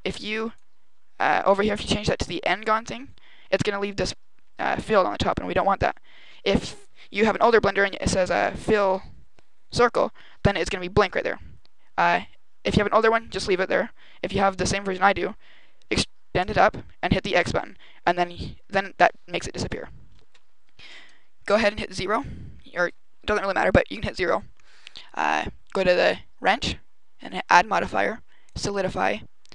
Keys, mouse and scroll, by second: 0.0 click, 2.5 click, 14.5 e, 16.4 click, 17.0 x, 18.7 middle click, 21.4 KP_0, 23.6 a, 26.3 click, 27.2 click.